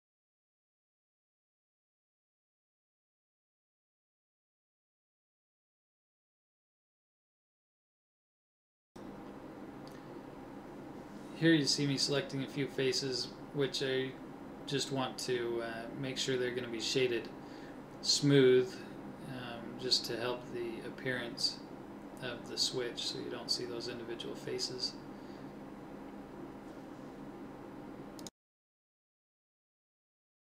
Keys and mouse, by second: 0.6-3.2 middle drag, 2.1 ctrl+Tab, 3.8-5.3 right drag, 5.6 ctrl+Tab, 8.6 middle click, 10.0 click, 10.1 click, 10.3 click, 19.5 a, 21.7-23.0 middle drag.